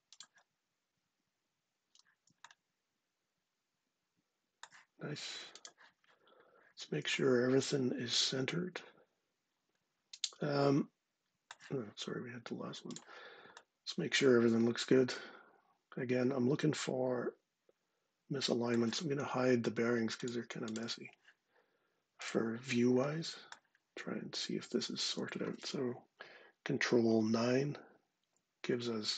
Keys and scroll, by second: 26.8 ctrl+9.